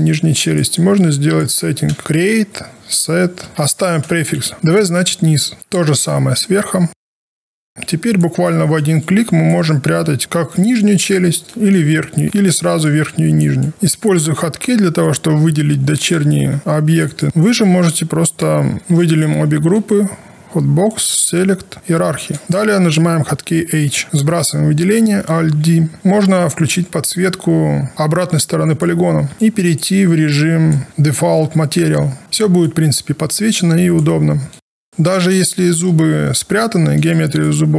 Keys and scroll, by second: 1.9 space, 4.5 w, 6.9 shift+u, 9.9 alt+1, 16.1 alt+a, 18.8 space, 23.8 h, 24.0 alt+1, 25.4 alt+d, 31.7 5.